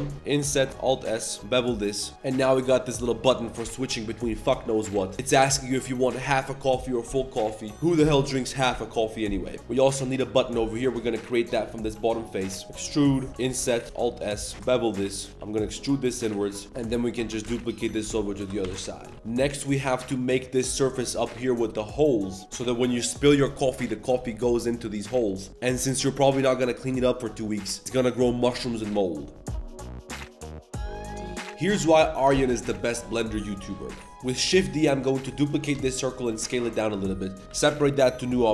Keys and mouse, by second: 0.0-0.1 typing, 0.7 alt+s, 1.4 ctrl+b, 1.4 2, 2.1 Tab, 2.1 a, 2.8 drag, 9.6 3, 9.6 shift+s, 9.6 z, 10.6 click, 10.9 z, 11.0 click, 11.3 click, 11.5 click, 12.0-13.3 typing, 13.1 click, 13.8 alt+s, 14.5 ctrl+b, 14.5-16.9 typing, 16.5 alt+click, 16.9 Tab, 18.4 shift+n, 18.6 Tab, 19.0 click, 34.0 middle click, 34.1 z, 34.2 middle click, 34.4 shift+d, 35.3 shift+drag, 35.5-38.5 typing, 38.3 Tab, 38.4 click.